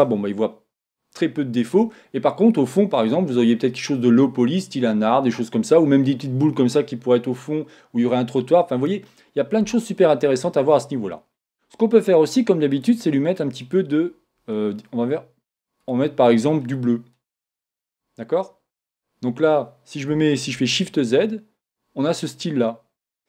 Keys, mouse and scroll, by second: 12.7 click, 15.8 click, 20.7 shift+z.